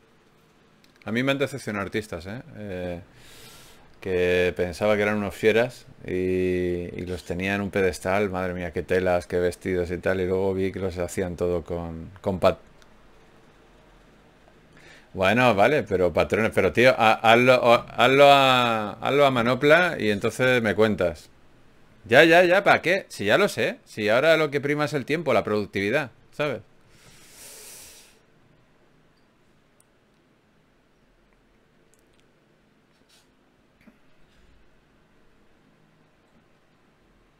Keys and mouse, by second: 0.6-2.4 right drag, 3.6 f, 5.0 ctrl+z, 5.9 ctrl+Tab, 8.2-10.2 drag, 9.4 f, 10.2 ctrl+Tab, 12.6 f, 13.6 f, 14.4 ctrl+z, 15.6 f, 18.1 ctrl+Tab, 25.9 ctrl+Tab, 27.1 click, 27.9 f, 28.1 f, 29.7-31.3 drag, 31.3 f, 31.9 click, 32.5 f.